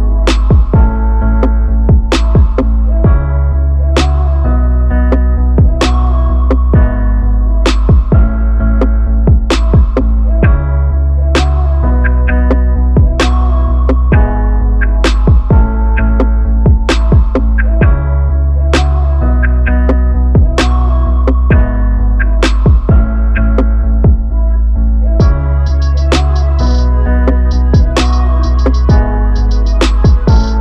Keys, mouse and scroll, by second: 4.9 click, 7.7 click, 8.5 click, 9.7 click, 10.8 click, 11.4-12.7 drag, 13.8-15.5 drag, 15.5 ctrl+Left, 15.6 Right, 16.1 Right, 16.3-16.9 Right, 17.4 Right, 17.8-18.3 Left.